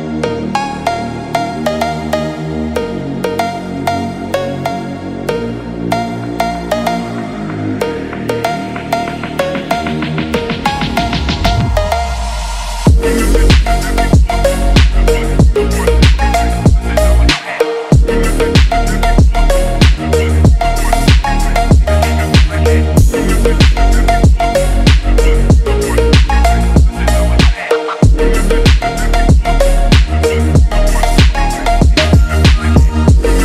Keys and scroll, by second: 1.5 ctrl+=, 10.5 ctrl+-, 19.4 ctrl+-, 25.7 ctrl+=.